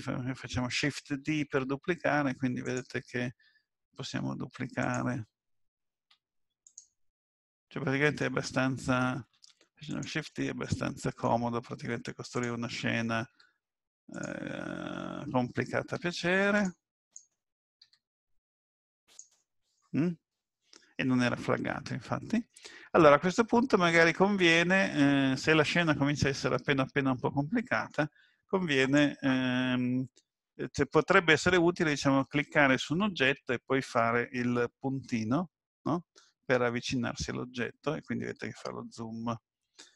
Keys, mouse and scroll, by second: 1.4 shift+d, 3.9 shift+d, 5.9 shift+d, 7.6 middle click, 9.4 shift+d, 10.3 middle click, 11.4-11.8 scroll down 2, 12.4 click, 12.4 scroll down 1, 13.3 s, 15.9 s, 17.0 click, 17.8 s, 22.5 middle click, 28.8 click, 35.0 KP_Decimal.